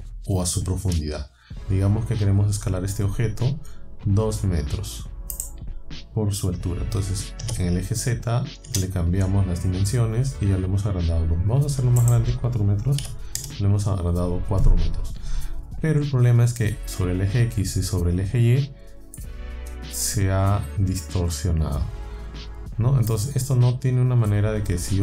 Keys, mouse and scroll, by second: 5.4 click, 7.4 KP_2, 8.7 KP_Enter, 12.0 middle click, 13.0 KP_4, 13.4 KP_Enter, 19.2-23.3 middle drag.